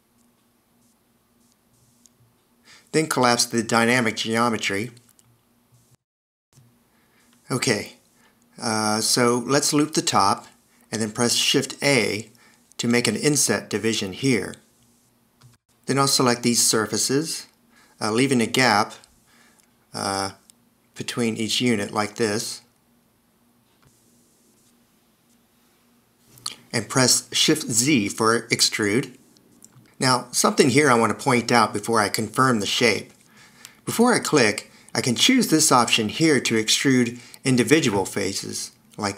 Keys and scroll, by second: 6.4 super+z, 9.0 s, 10.5 alt+e, 11.5 shift+a, 17.8 d, 25.8 super+z, 28.1 shift+z.